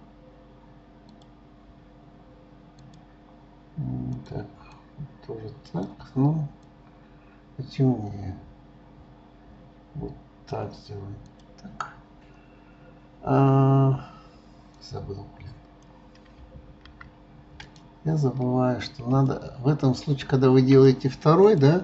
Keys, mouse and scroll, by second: 1.1-1.8 drag, 2.8 click, 11.2 click, 14.7 click, 17.6 click, 18.2-19.1 scroll up 1, 19.1 space, 19.3-21.4 middle drag, 21.4 click.